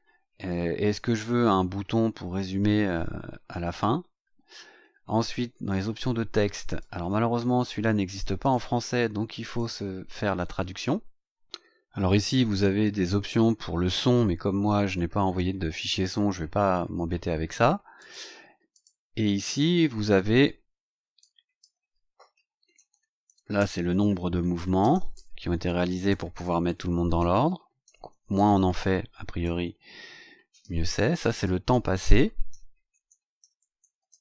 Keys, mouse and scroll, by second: 5.1 click, 5.8 scroll down 2, 6.6 click, 8.3 click, 9.5 click, 11.8 scroll down 2, 14.5 scroll down 2, 16.6-17.0 scroll up 2, 17.9 click, 18.7 click, 19.4 click, 20.2 scroll down 1, 21.1 click, 22.3-29.4 typing, 30.6 click, 31.7 click, 32.5-34.2 typing.